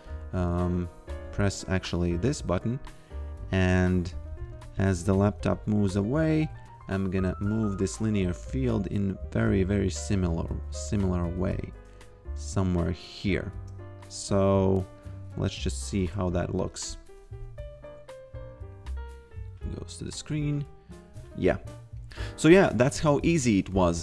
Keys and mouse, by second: 3.6 f, 4.3 a, 5.0 g, 9.4 x, 10.3 click, 11.3 shift+click, 14.0 click, 15.8-16.8 typing, 21.1 f.